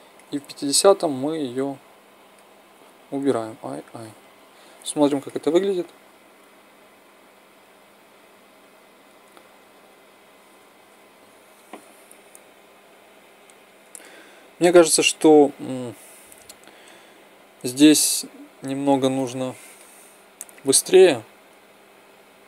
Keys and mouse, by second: 1.3-3.3 drag, 3.0 i, 3.4 i, 4.3 click, 5.6 alt+a, 10.2 Escape, 10.9 alt+a, 13.9 Escape.